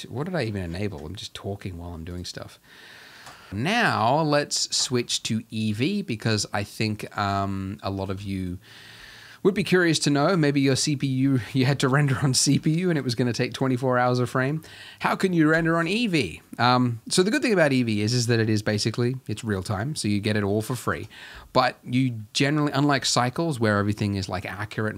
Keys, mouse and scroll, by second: 0.1-0.9 scroll down 10, 1.2-2.2 scroll down 31, 2.3 click, 3.5 z, 5.2 click, 5.2 scroll down 2, 5.9 z, 6.6-7.3 scroll down 1, 7.4-15.6 shift+middle drag, 18.1 Escape, 18.4-20.9 middle drag, 20.9 KP_0.